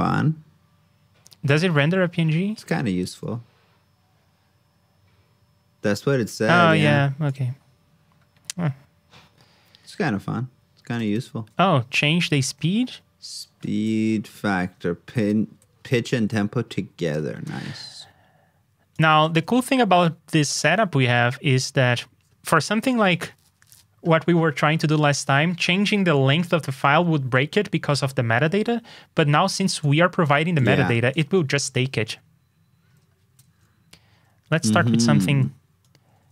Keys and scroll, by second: 12.2 super+c, 12.4 super+Tab, 15.9 alt+shift+Down, 19.4 super+v, 31.7 super+Tab.